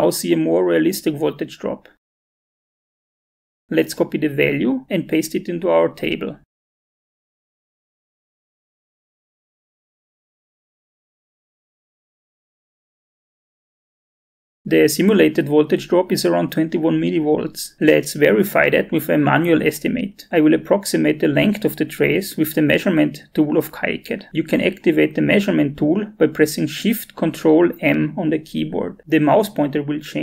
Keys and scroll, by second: 7.3 ctrl+c, 10.3 ctrl+v, 11.2-13.8 typing, 13.9 Return, 27.1 ctrl+shift+m.